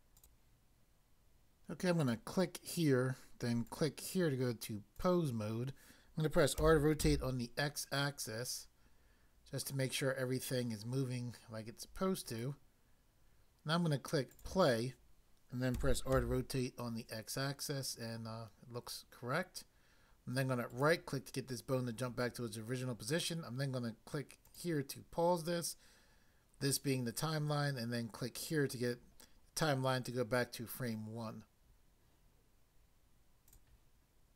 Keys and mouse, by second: 0.2 click, 2.0 click, 3.7 click, 5.0 click, 6.6-7.0 typing, 12.2 right click, 14.3 click, 15.8-16.2 typing, 20.6 right click, 24.4 click, 28.4 click, 33.5 click.